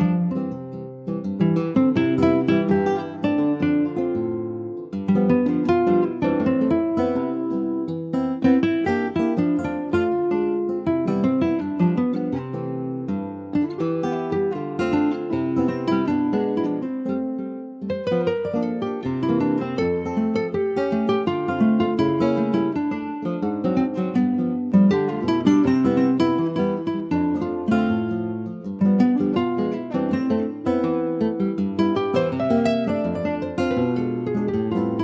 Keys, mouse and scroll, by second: 0.5-0.9 scroll up 2, 0.9 middle click, 1.4 ctrl+s, 2.0 /, 2.3-6.0 middle drag, 6.0 ctrl+s, 6.6 /, 7.1 middle click, 7.6 Tab, 8.3 middle click, 8.6-9.3 scroll up 2, 9.3 click, 10.3 2, 10.5 click, 10.8 scroll down 2, 11.0-13.3 middle drag, 13.3 alt+shift+click, 14.4 x, 15.3 middle click, 15.9 scroll up 1, 16.0 Tab, 16.2-17.3 middle drag, 17.3 3, 17.4 click, 17.9 middle click, 18.6 4, 19.0 click, 19.4 3, 19.7 click, 20.6 3, 20.8 click, 21.3 Tab, 22.6 3, 22.8 click, 23.3 middle click, 23.4-24.1 scroll up 1, 24.1 ctrl+b, 29.2 middle click, 29.6 Tab, 29.7 click, 30.1 middle click, 30.6 ctrl+s, 30.7 click, 31.0 middle click, 31.5 Tab, 31.8 middle click, 32.2 scroll up 1, 32.3 click, 32.8-34.0 middle drag, 34.0 |.